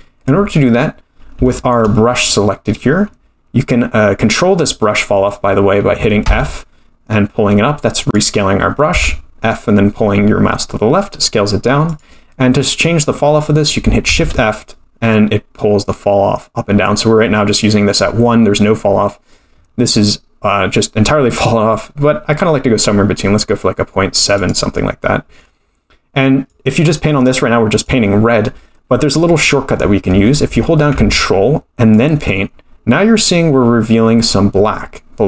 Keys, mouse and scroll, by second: 1.0-1.3 scroll up 1, 1.4 shift+middle click, 2.9 scroll up 1, 6.3 f, 8.9 f, 14.0 shift+f, 26.5 click, 31.9 ctrl+click.